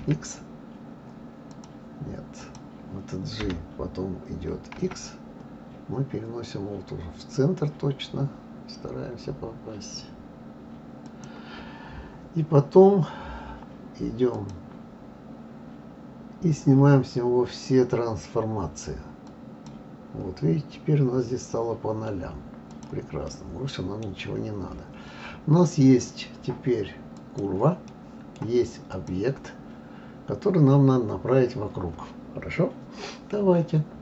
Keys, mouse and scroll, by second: 1.5 click, 2.4 click, 3.4 g, 14.3 click, 19.3 click, 22.7 click, 23.2-24.1 middle drag, 24.1-25.2 scroll down 5, 25.2-27.1 scroll up 2, 27.1 click, 27.9-28.9 middle drag, 28.9 click, 29.6-32.7 scroll down 2.